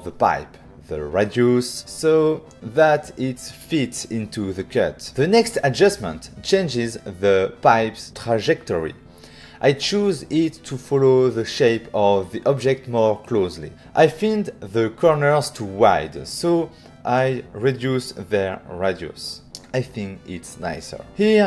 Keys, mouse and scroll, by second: 1.1 ctrl+click, 1.1 click, 1.3 click, 2.3 click, 2.4 shift+click, 4.5 shift+click, 5.4 click, 9.7 click, 11.6 click, 12.5 click, 13.5 click, 14.9 click, 17.8 shift+click, 18.9 click, 19.0 click, 19.8 middle click.